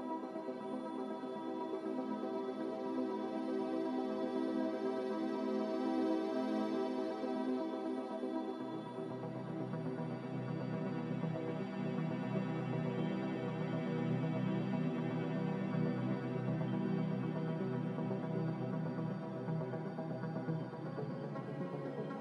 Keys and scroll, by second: 4.2 2, 4.4 Return, 5.4 Return, 14.6 b, 17.7 Delete, 18.4 n, 21.0 a.